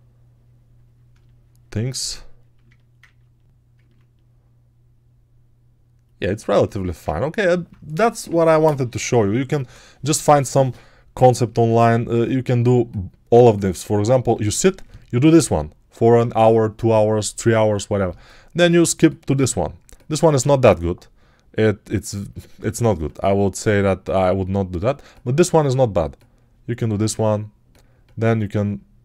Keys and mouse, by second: 23.1-29.0 drag.